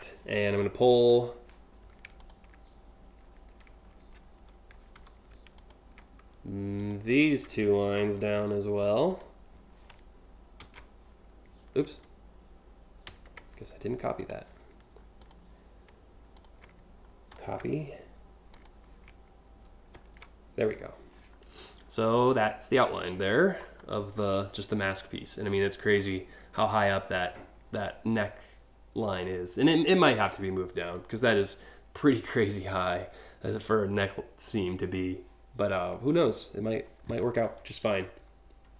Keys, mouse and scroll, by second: 0.7 click, 1.8 click, 4.6 a, 5.2 ctrl+click, 6.4 shift+click, 8.7 click, 10.2 ctrl+c, 12.7 ctrl+z, 13.8 click, 14.8 click, 16.0 shift+click, 16.9 ctrl+c, 18.1 click, 19.6 ctrl+v, 20.5 scroll up 2, 20.8 scroll down 1, 21.3-21.8 scroll up 1, 21.8 click, 22.4-22.9 scroll up 2, 23.1 scroll down 1.